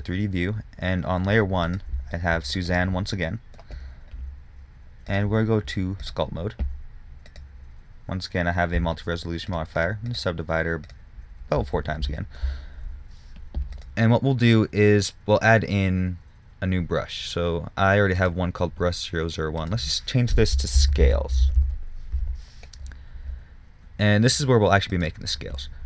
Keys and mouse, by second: 0.0 Escape, 3.0-4.6 middle drag, 12.6-16.0 drag, 19.9-25.8 drag.